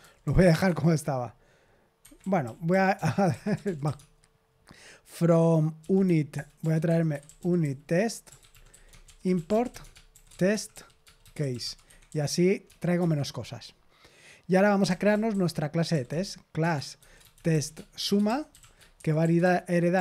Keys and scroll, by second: 0.0-4.3 typing, 5.5-13.4 typing, 14.5-20.0 typing.